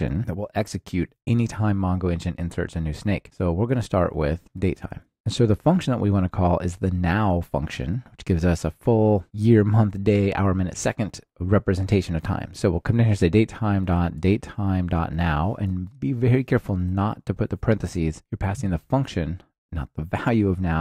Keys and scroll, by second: 0.1 Return, 4.4 Return, 12.6 super+v, 14.5 Return.